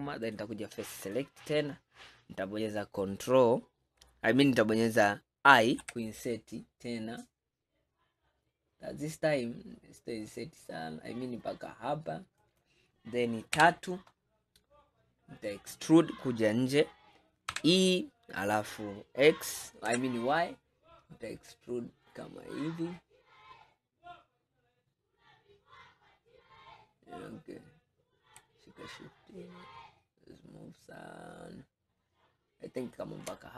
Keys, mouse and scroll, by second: 0.3 click, 1.1 click, 2.3-2.8 scroll up 1, 13.6 KP_3, 14.8-17.6 scroll up 3, 17.6 e.